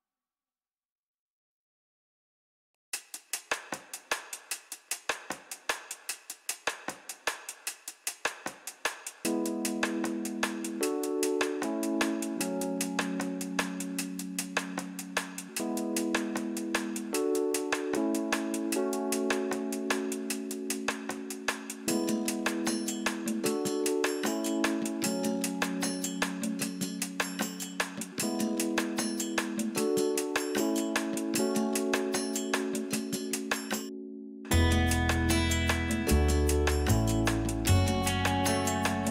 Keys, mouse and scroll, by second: 1.4-2.0 scroll up 2, 2.1 k, 3.1 Return, 3.2 click, 3.7 k, 5.0 Return, 5.2 click, 5.2 scroll down 1, 5.3 middle click, 5.5 scroll up 1, 5.6 middle click, 6.2-6.7 scroll up 1, 6.8 middle click, 7.2 click, 7.5 click, 7.8 click, 7.9 middle click, 8.1 scroll down 1, 8.3 middle click, 8.6-8.9 scroll up 1, 8.9 scroll down 1, 9.2 middle click, 9.8 g, 11.2 click, 11.4 middle click, 12.0 scroll up 1, 12.1 shift+middle click, 12.2 click, 13.0 g, 14.0 click, 14.3 scroll up 1, 14.4 middle click, 14.5 scroll down 1, 14.6 middle click, 15.1-22.6 middle drag, 15.1 scroll down 2, 15.4 scroll up 2, 15.6-16.1 scroll down 4, 16.3 scroll up 2, 17.1 scroll down 2, 17.3 KP_1, 18.0 scroll up 1, 18.8 scroll up 1, 19.5 shift+click, 20.6 g, 21.5 click, 21.5 scroll down 1, 22.6 click, 22.7-26.0 middle drag, 23.2 scroll up 2, 23.4-23.8 scroll down 4, 24.2-25.2 scroll up 2, 25.5 scroll up 2, 26.0-27.0 drag, 28.3 click, 28.5 middle click, 28.6-28.9 scroll up 2, 28.9 scroll down 2, 29.2-32.3 shift+drag, 32.3 g, 34.0 click, 34.3 scroll down 1, 34.4-35.4 middle drag, 34.9 scroll up 1, 35.0 scroll down 1, 35.8 click, 36.3 scroll down 1, 36.4 scroll up 1, 37.3-39.1 middle drag, 37.3 e, 37.9 click, 38.8-39.1 scroll up 2.